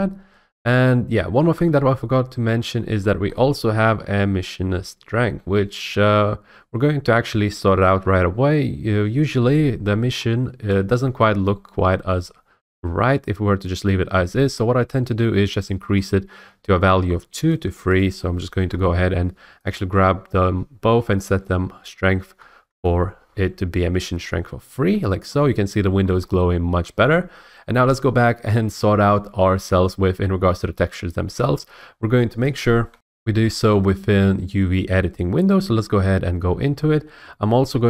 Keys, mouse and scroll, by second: 2.4-2.8 scroll, 3.3-4.4 scroll, 10.1-10.8 scroll, 11.2-12.2 scroll, 17.5 click, 18.0 click, 18.6 3, 18.8 Return, 19.7 click, 21.3 click, 22.3 Return, 24.8-26.0 scroll, 26.0-26.8 scroll, 29.4 middle click, 30.0-32.1 middle drag, 32.9 F8, 35.5-37.6 drag.